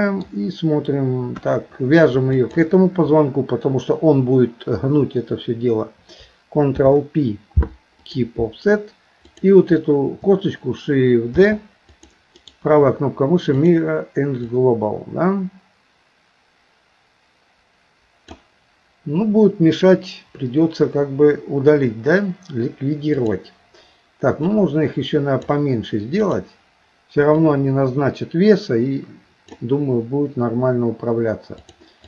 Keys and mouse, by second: 1.3 KP_1, 2.3 shift+click, 9.3 click, 11.4 shift+d, 12.4-13.7 right drag, 14.4-18.4 drag, 24.5-25.5 drag, 26.3 click, 27.5-29.5 drag, 31.6 click.